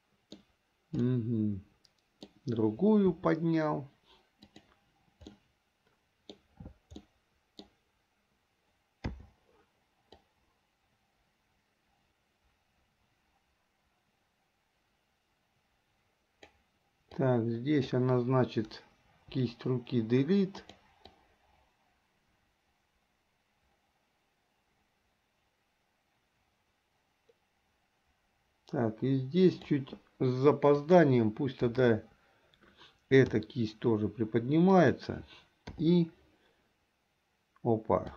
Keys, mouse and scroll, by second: 1.2-2.5 middle drag, 3.3 r, 5.5-6.5 middle drag, 7.2-7.8 middle drag, 9.2 i, 10.3-16.6 drag, 17.3-18.0 drag, 19.4 Delete, 20.7 click, 21.3-29.8 drag, 31.0 click, 32.5 KP_3, 33.4 r, 35.8 i.